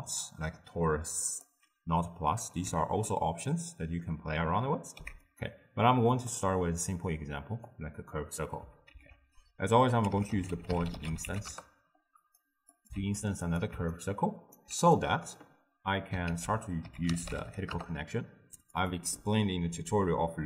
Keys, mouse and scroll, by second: 2.7 Tab, 3.5 scroll down 2, 3.5-5.5 middle drag, 5.5 x, 6.3 click, 11.5 ctrl+a, 13.0 shift+d, 14.6-17.8 alt+right drag, 17.8 ctrl+a.